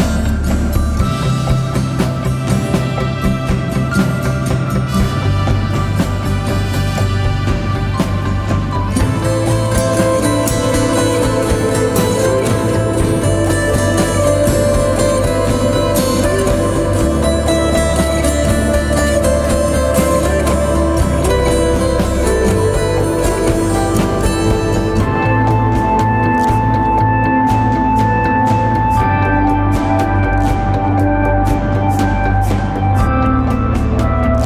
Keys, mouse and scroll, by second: 10.8 double click, 12.8-13.3 typing, 21.0-22.0 typing, 24.1-26.4 typing, 26.4 double click.